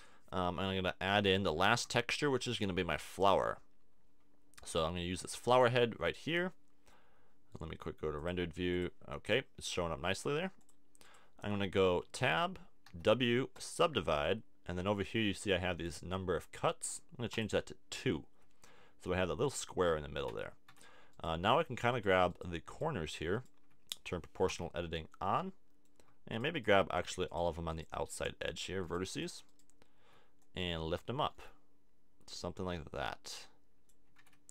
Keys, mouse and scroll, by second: 1.6 shift+a, 6.5 middle click, 12.1 Tab, 12.9 w, 17.3-19.2 drag, 19.2-20.7 middle drag, 20.3 Tab, 20.7 Tab, 21.1-24.1 right drag, 24.5 o, 28.4-30.4 drag, 30.4 middle click, 31.2-32.4 drag, 34.1 a, 34.2 Tab.